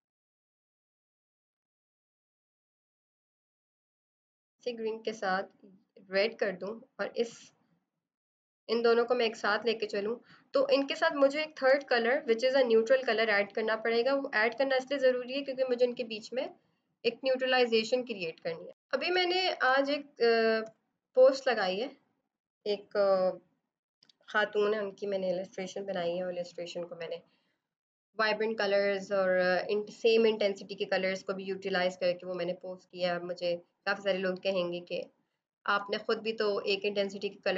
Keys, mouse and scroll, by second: 8.4 click, 11.6 b, 12.6 alt+click, 13.1 right click, 13.8 click, 17.4 click, 19.0 space, 20.5 v.